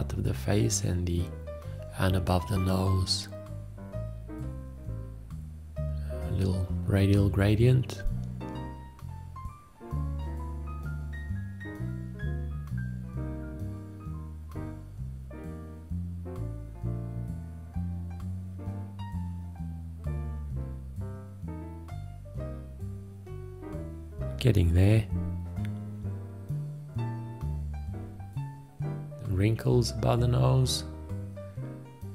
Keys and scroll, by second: 2.0 ctrl+Tab, 3.2 ctrl+Tab, 5.4 v, 7.1 ctrl+space, 7.4 d, 8.8 ctrl+Tab, 10.0-11.8 typing, 12.8 ctrl+Tab, 13.4 ctrl+a, 13.8 ctrl+Tab, 14.3 v, 15.4 ctrl+z, 15.8 ctrl+z, 16.3 ctrl+Tab, 16.4 ctrl+Tab, 16.5 ctrl+z, 18.9 ctrl+s, 18.9 ctrl+a, 19.0 space, 20.0 space, 20.4 space, 20.9 ctrl+a, 21.1 space, 22.0 ctrl+space, 23.0 ctrl+s, 23.2 d, 23.5 b, 24.0 BackSpace, 25.6 Escape, 26.6 b, 27.5 ctrl+Tab, 27.7 ctrl+1, 28.0 ctrl+Tab, 28.2 ctrl+1, 29.0 Escape, 29.1 ctrl+space, 29.2 ctrl+space, 29.8 ctrl+space, 30.2 BackSpace, 31.8 ctrl+Tab, 32.0 ctrl+space.